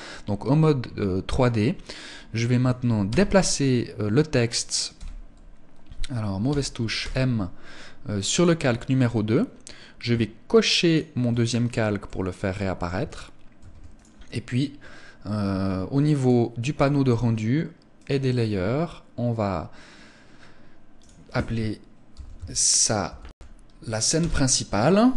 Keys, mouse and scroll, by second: 2.5 m, 4.4 n, 5.9 n, 6.4 m, 10.3 shift+click, 11.5 middle click, 13.0 ctrl+s, 15.6 click, 17.4 click, 20.4 click.